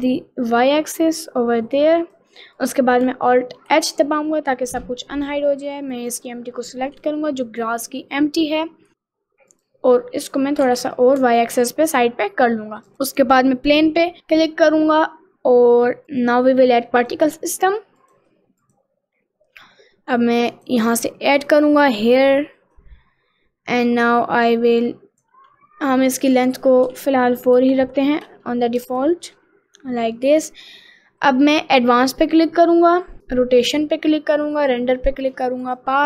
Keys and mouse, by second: 2.6 click, 3.7 alt+h, 6.0 click, 7.0 click, 9.6 click, 10.7 g, 13.1 middle click, 16.3 click, 17.0 click, 17.6 click, 18.1 click, 18.7 click, 20.7 click, 22.4 click, 24.9 click, 26.3-28.1 drag, 28.9 ctrl+z, 32.3 click, 33.7 click, 34.7 click, 35.7-36.0 drag.